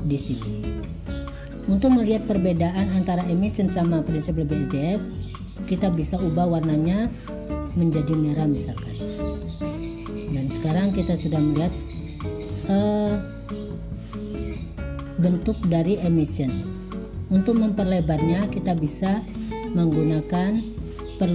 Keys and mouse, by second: 1.4 click, 5.8 click, 18.6 click.